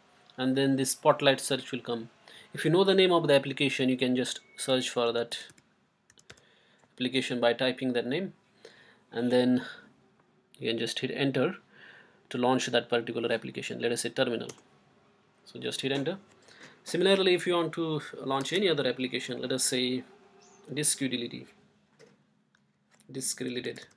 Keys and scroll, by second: 4.8-6.8 typing, 14.5 Return, 20.2 Right, 20.9 BackSpace, 21.2 BackSpace, 23.1-23.9 typing.